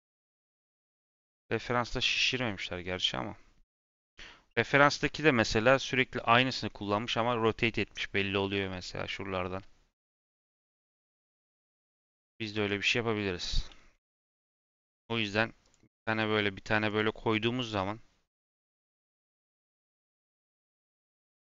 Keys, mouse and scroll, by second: 12.0 click, 12.5 Tab, 13.7 s, 15.5 click, 16.0 s.